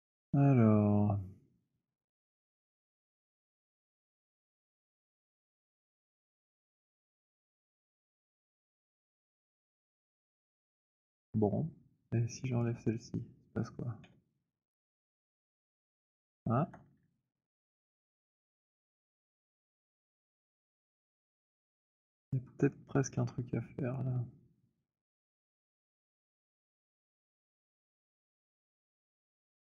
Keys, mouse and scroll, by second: 4.5 alt+click, 5.6 click, 6.7 alt+middle click, 8.0 alt+click, 10.1 alt+click, 10.7 alt+click, 10.7 w, 12.5 click, 13.9 Delete, 22.1 alt+click, 23.1 alt+middle click, 26.9 click, 28.1 alt+click, 28.4 z.